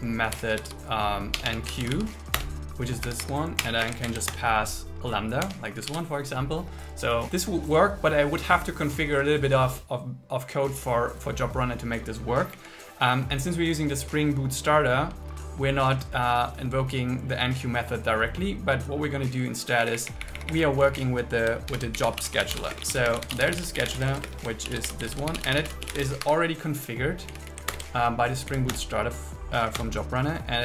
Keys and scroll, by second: 2.4 BackSpace, 2.6 Return, 3.1 Escape, 3.9 space, 4.1 alt+8, 4.3 Return, 5.6 Tab, 5.9 super+s, 12.6 Down, 19.9 Up, 20.9 Left, 21.7 shift+8, 22.3 shift+8, 22.7 space, 24.3-25.8 typing, 26.3 Escape, 27.3 Left, 28.7 Down, 28.9 Return.